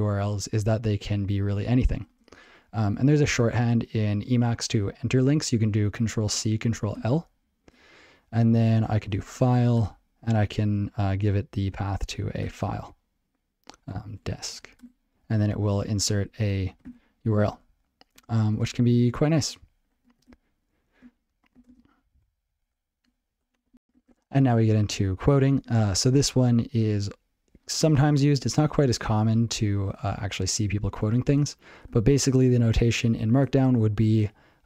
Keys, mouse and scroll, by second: 12.5 Return, 13.8-15.8 typing, 16.8 ctrl+l, 17.5 ctrl+g, 25.4 click, 28.9 ctrl+l, 29.1 click, 29.2 ctrl+l, 29.9 ctrl+/, 30.9 ctrl+s.